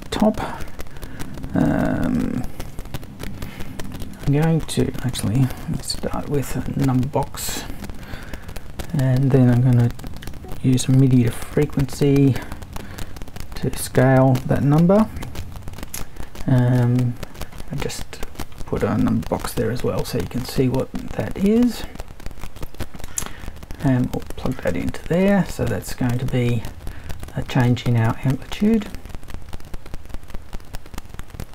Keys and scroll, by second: 2.6 super+i, 5.6 BackSpace, 6.0 super+3, 8.9 super+i, 10.2-12.0 typing, 15.4 super+i, 16.7 BackSpace, 19.2 BackSpace, 19.5 super+3.